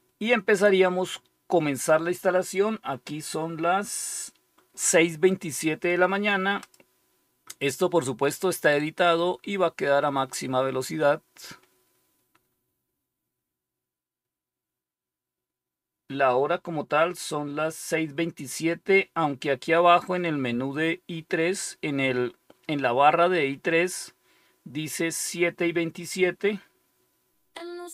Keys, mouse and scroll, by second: 6.5 click.